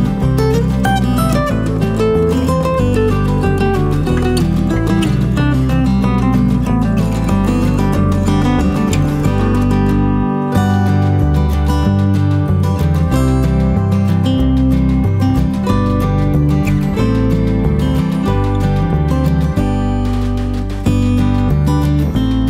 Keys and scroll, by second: 1.9 space, 2.6 +, 2.9 space, 3.6 shift+F6, 11.6 F1, 12.4 End, 15.0 space, 15.9 shift+F6, 20.0 space.